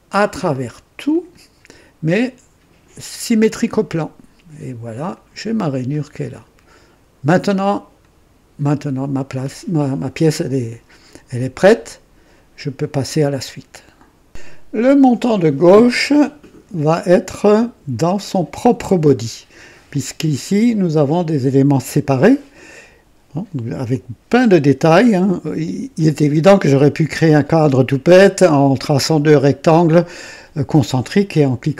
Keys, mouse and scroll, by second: 0.2 click, 1.1 click, 3.2 click, 5.0 click, 5.9-7.5 drag, 8.0-9.0 drag, 14.2 click, 15.5-16.8 drag, 16.9-17.7 right drag, 19.8 click, 20.6 click, 22.2-22.8 drag, 23.9-26.4 drag.